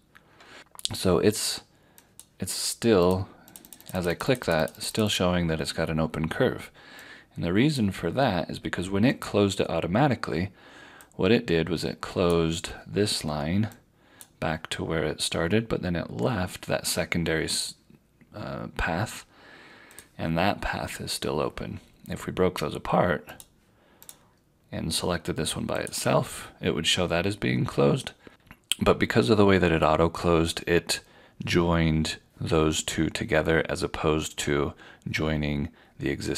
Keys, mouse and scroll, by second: 0.6 ctrl+z, 2.1 click, 19.9 click, 23.3 click.